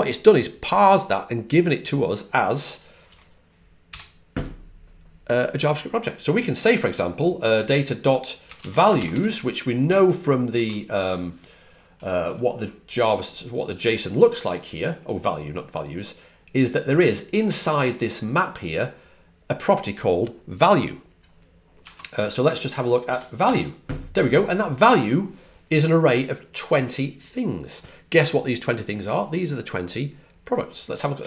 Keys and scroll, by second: 2.8-4.3 typing, 8.1-9.5 typing, 10.4 super+Tab, 10.4 super+Right, 23.4 Return, 31.1 Up.